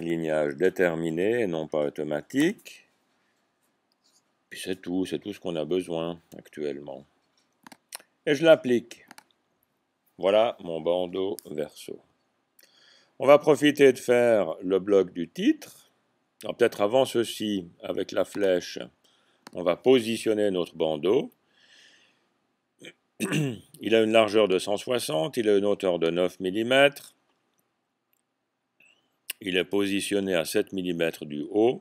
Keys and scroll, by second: 0.1 typing, 2.4 Tab.